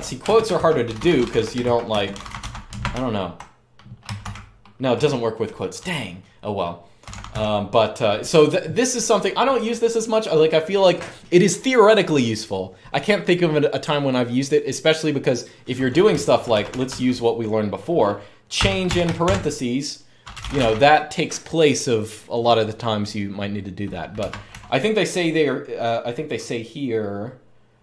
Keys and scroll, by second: 0.0-4.0 typing, 6.5-7.5 typing, 15.8-17.1 typing, 18.3-20.6 typing, 24.0 Escape, 24.2 u, 27.3-27.8 typing.